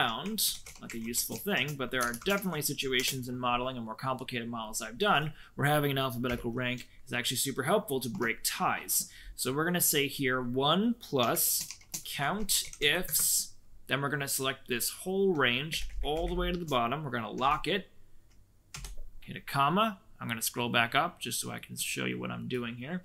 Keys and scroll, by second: 0.0-3.0 typing, 6.2 =, 8.1 1, 11.0-13.3 typing, 15.6 ctrl+shift+Down, 15.8 ctrl+shift+Down, 16.1 ctrl+shift+Down, 17.3 F4, 18.6 ,.